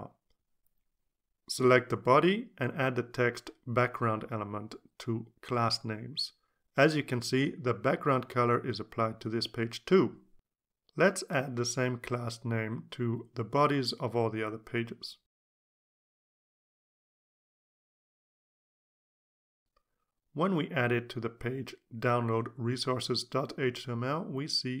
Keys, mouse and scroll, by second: 1.3 click, 2.2-7.1 typing, 7.1 Return, 16.5 click, 17.1 click, 18.8 click, 19.6 click, 19.9-23.0 typing.